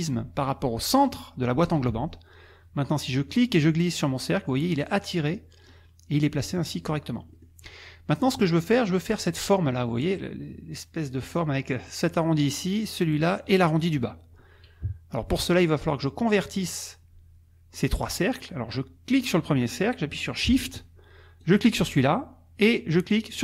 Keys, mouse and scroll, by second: 1.7 click, 3.3-5.8 drag, 6.7 click, 7.4-8.8 drag, 14.8 KP_Subtract, 15.4 middle click, 16.3 click, 17.7 click, 19.1 click, 21.4 shift+click, 23.3 shift+click.